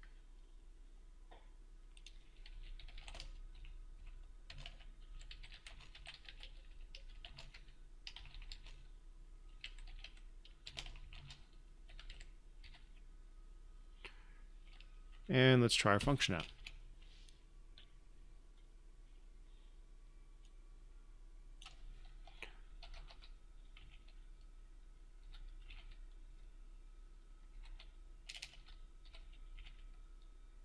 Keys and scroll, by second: 16.8 ctrl+F5.